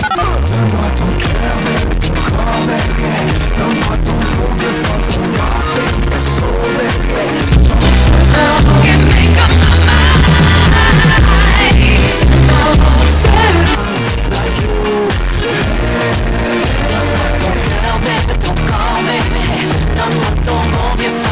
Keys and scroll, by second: 13.8 Page_Down.